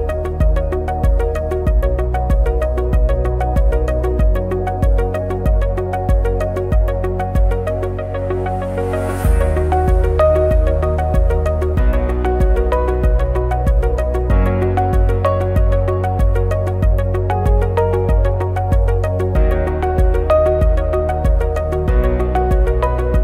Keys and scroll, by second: 1.3 ctrl+shift+a, 2.5 ctrl+=, 3.1 ctrl+f, 5.5 ctrl+shift+a, 6.0 Delete, 10.1 ctrl+shift+a, 10.6 ctrl+-, 11.9 ctrl+=, 14.1 ctrl+c, 14.9 ctrl+v, 16.4 ctrl+f, 17.8 ctrl+f, 19.2 ctrl+c, 19.3 ctrl+f, 21.1 ctrl+f.